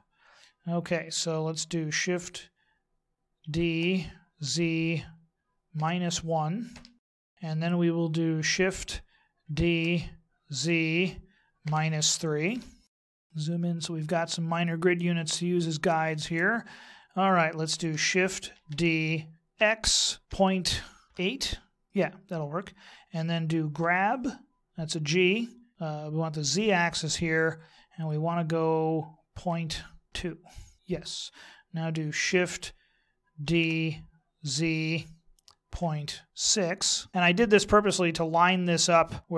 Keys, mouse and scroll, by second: 3.4 shift+d, 7.2-9.4 scroll down 4, 9.4 shift+d, 13.1-14.9 scroll up 4, 13.2 shift+middle click, 18.5 shift+d, 23.8 g, 33.4 shift+d.